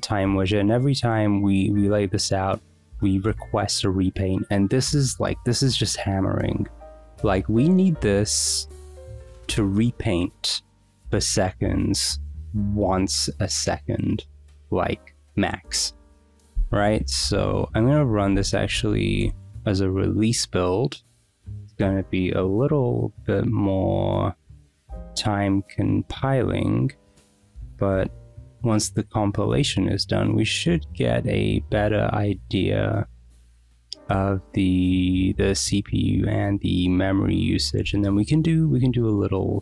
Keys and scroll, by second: 16.8 ctrl+c, 17.3 Up, 18.0-19.5 typing.